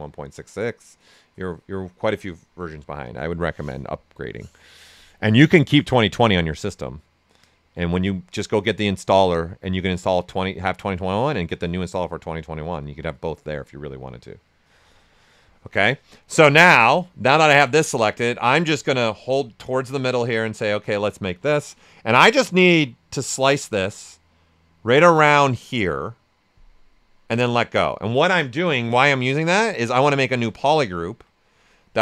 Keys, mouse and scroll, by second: 17.8-20.2 ctrl+right drag, 20.2 ctrl+shift+click, 21.3 space, 28.9 shift+f, 29.7 shift+right click.